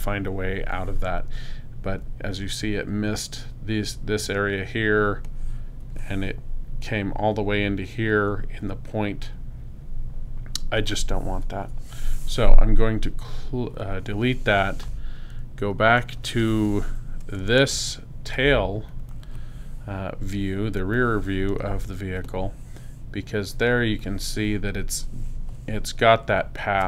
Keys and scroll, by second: 5.0 space, 11.6 BackSpace, 16.0 super+0, 18.3 super+space.